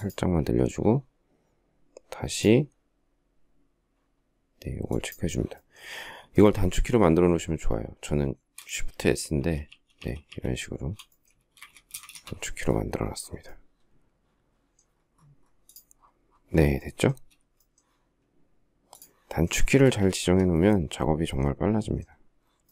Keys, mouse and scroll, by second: 9.4 shift+s, 11.3 space, 11.4 Escape, 11.7 space, 11.8 Escape, 19.6 space, 19.7 Escape, 20.0 Escape.